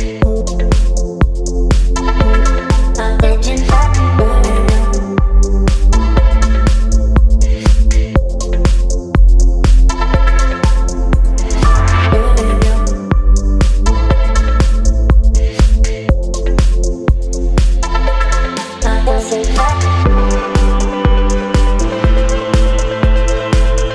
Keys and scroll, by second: 4.8 KP_1, 4.8 KP_0, 5.4 Return, 19.0 Return.